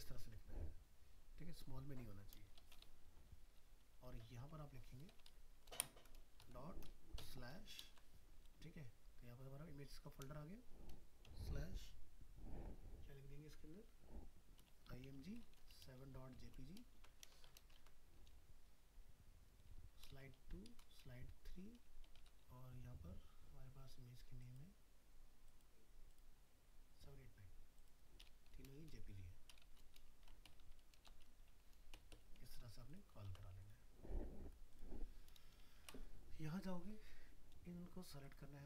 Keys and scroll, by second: 7.8 ctrl+space, 17.0 ctrl+c, 17.5 ctrl+v, 33.3 ctrl+s.